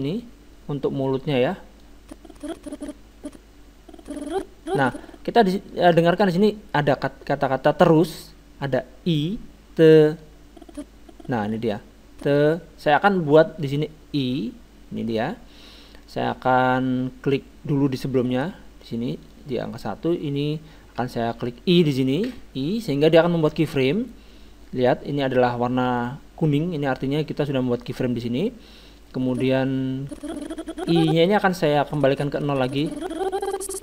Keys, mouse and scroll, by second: 5.9-8.2 middle drag, 10.2-12.7 drag, 18.2-20.9 drag, 22.3 i, 29.0-30.0 drag, 31.9-33.7 drag.